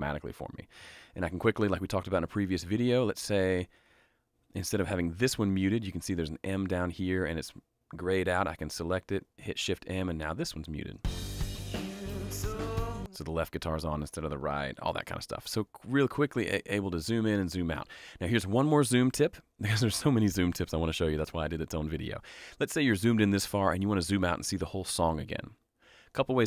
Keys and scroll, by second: 8.3 shift+m, 10.9 space, 12.9 space, 13.7 shift+space, 14.8 shift+m.